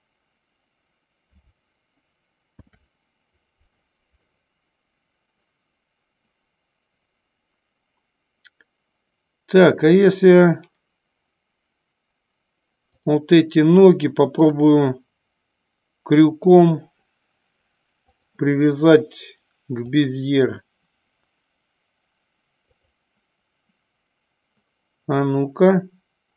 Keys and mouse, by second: 2.5 ctrl+p, 14.7-16.7 drag, 18.2 click, 22.9 click.